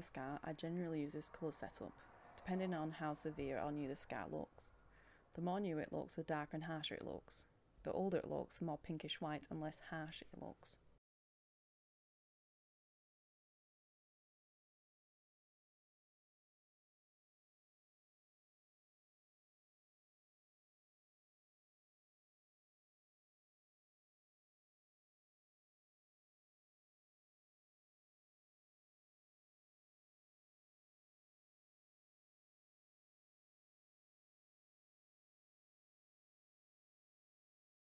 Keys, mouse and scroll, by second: 4.0 click, 20.5 click, 27.3-30.5 scroll up 1, 30.5-37.9 drag.